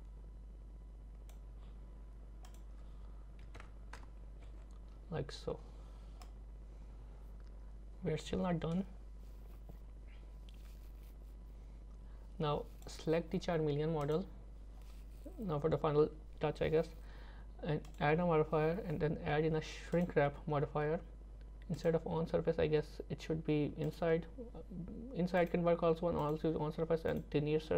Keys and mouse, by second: 2.4-4.0 drag, 6.3-12.9 drag, 14.0 click, 17.9-20.1 drag, 21.8-24.0 drag, 25.5 click, 27.2-27.7 drag.